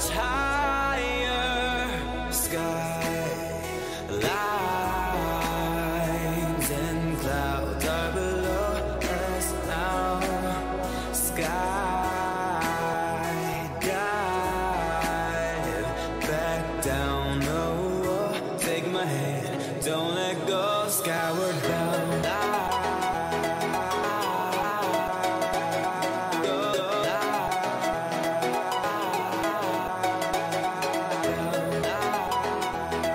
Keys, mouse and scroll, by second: 0.2 right click, 1.1 middle click, 2.1-4.0 drag, 5.6-8.0 middle drag, 14.1-16.9 middle drag, 26.8 ctrl+z, 29.3-31.4 middle drag.